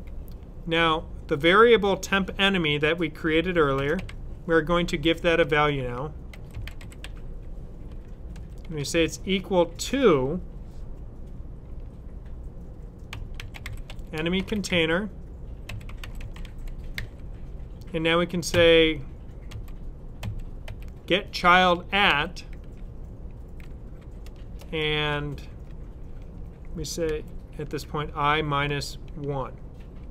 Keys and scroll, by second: 3.4-4.7 typing, 5.9-8.2 typing, 12.7-16.8 typing, 18.4-20.5 typing, 21.9 typing, 26.9-29.0 typing.